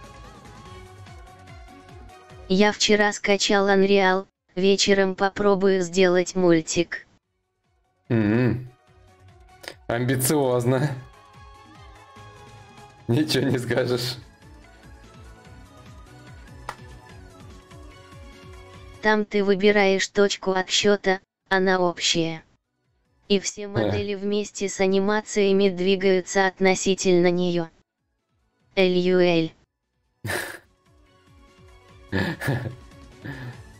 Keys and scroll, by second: 16.1 ctrl+a, 16.7 ctrl+c, 18.9 ctrl+shift+v.